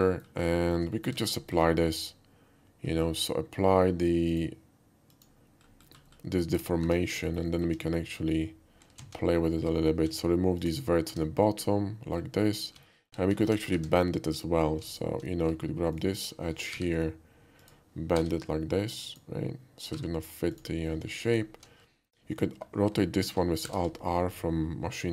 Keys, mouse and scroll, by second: 0.1 middle click, 0.6 shift+middle drag, 0.9 shift+middle drag, 1.2 alt+middle click, 1.4 alt+middle click, 3.0 alt+middle drag, 4.4 click, 5.1 click, 5.8 middle click, 6.5 click, 6.9 Tab, 7.3 middle click, 7.5 alt+middle click, 9.0 alt+z, 10.0 x, 10.7 click, 11.1 Tab, 11.6-12.1 middle drag, 12.8 alt+middle click, 13.0 alt+middle click, 13.4 alt+middle click, 13.7 Tab, 15.0 alt+click, 16.0 alt+click, 16.7 g, 17.7 click, 18.2 r, 19.1 click, 20.0 g, 20.6 click, 21.3 alt+click, 23.6 alt+r.